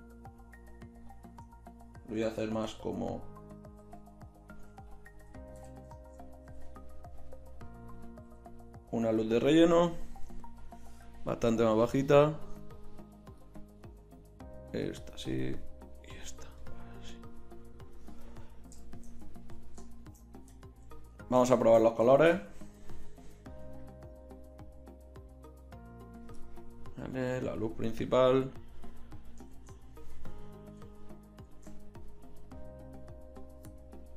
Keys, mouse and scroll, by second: 2.7 g, 3.8 r, 5.6 KP_7, 6.5 r, 7.8-8.2 drag, 8.2 g, 10.6-11.8 drag, 15.6-16.6 right drag, 18.4-19.5 right drag, 23.4 shift+z, 29.6 shift+z, 30.5-32.7 drag, 32.7 shift+z.